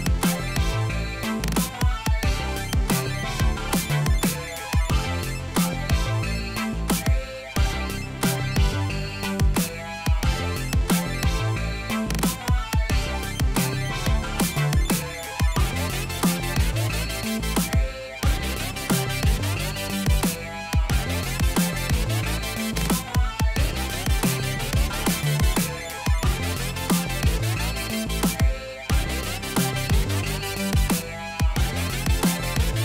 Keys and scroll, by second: 2.1 ctrl+x, 2.7 ctrl+z, 15.8-17.9 typing, 20.2-21.0 typing, 27.4-30.7 typing.